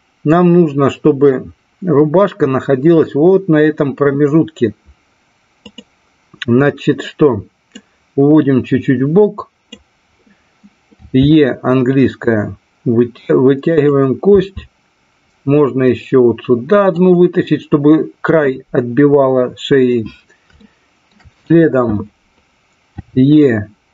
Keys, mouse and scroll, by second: 5.6 click, 7.6-9.6 drag, 11.1 e, 13.7 click, 14.2 e, 16.8 click, 20.6 shift+middle click, 23.0 e.